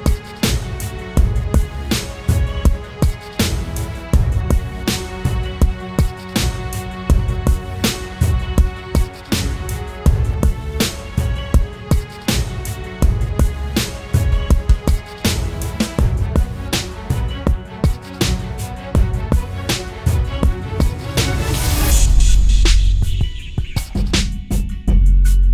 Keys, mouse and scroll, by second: 4.4 alt+click, 7.2 typing, 8.6 double click, 16.3-16.9 alt+scroll up 1, 17.3-17.8 alt+scroll up 1, 24.3 e.